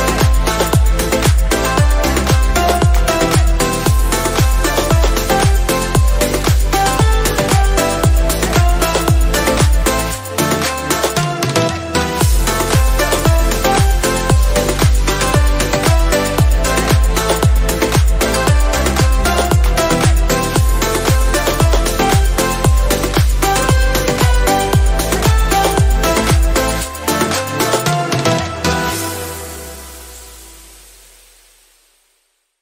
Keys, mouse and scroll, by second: 1.3 click, 5.7 click, 6.0 ctrl+z, 8.9 click, 9.3 right click, 12.1 click, 13.3 right click, 14.9 click, 15.4 right click, 16.7 click, 17.9 right click, 19.0 click, 21.3 ctrl+click, 23.9 shift+F5, 25.6 click, 27.8 ctrl+d, 28.9-31.9 drag, 31.9 ctrl+t.